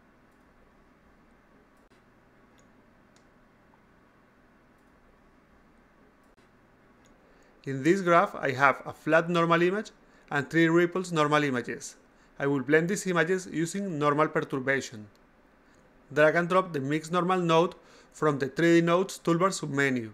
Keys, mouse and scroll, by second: 4.9 a, 5.4-6.5 drag, 7.0 click, 9.0 click, 9.2 click, 10.9 click, 11.1 click, 11.9 click, 12.1 click, 12.8 click, 13.0 click, 13.7 click, 13.9 click, 15.7 click, 16.9-18.8 drag, 19.1 click.